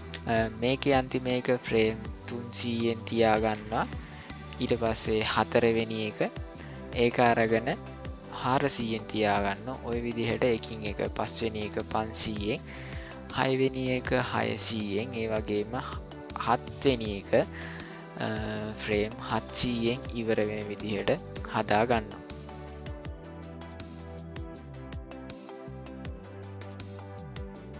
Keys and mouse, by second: 3.9 middle click, 7.0 g, 9.9 middle click, 10.6 middle click, 10.9 click, 11.6 g, 13.3 middle click, 14.2 click, 15.1 g, 17.3 ctrl+shift+z, 17.8 g, 19.7 g, 20.2 click, 20.6 g, 21.7-24.5 drag, 25.1 g, 26.0-27.7 drag.